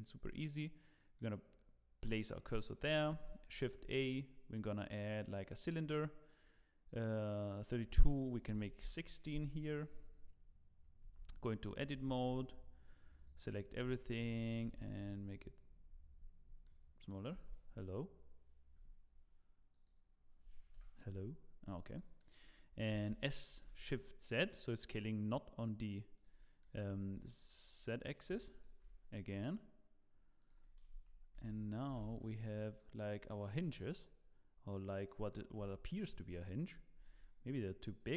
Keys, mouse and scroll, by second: 0.0 shift+right click, 2.8 middle click, 3.1 shift+a, 5.7 scroll down 2, 7.6 click, 8.8 click, 11.0 Tab, 12.3 a, 12.3 s, 13.7 s, 15.6 scroll down 2, 15.6 s, 16.2-17.1 scroll down 14, 16.6 middle click, 17.3 s, 20.7 KP_Decimal, 21.5-22.1 scroll down 8, 21.9 middle click, 22.9 s, 26.4 middle click, 26.8-27.3 scroll up 5, 27.1 middle click, 28.3 s, 31.3 Tab, 31.8 g, 33.7 middle click, 35.0 middle click, 35.5-35.8 scroll up 3, 35.8 shift+middle click, 36.1 shift+middle click, 36.3 scroll up 1, 36.4-37.1 scroll down 11, 37.2 middle click.